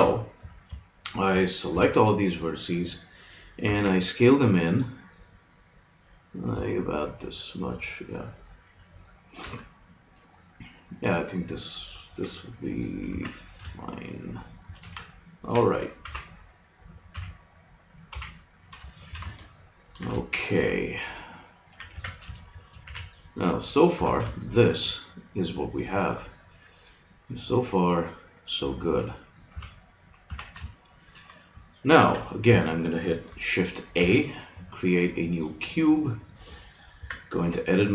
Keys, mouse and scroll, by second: 0.9-2.8 drag, 1.7 a, 3.7 s, 9.6-12.2 middle drag, 13.1 s, 15.1-16.1 middle drag, 16.1 KP_6, 16.1 KP_3, 17.1 a, 18.1 KP_3, 21.9 Tab, 22.8 a, 23.9 z, 29.5 KP_3, 30.3 z, 30.7 middle click, 33.9 shift+a, 37.0 Tab.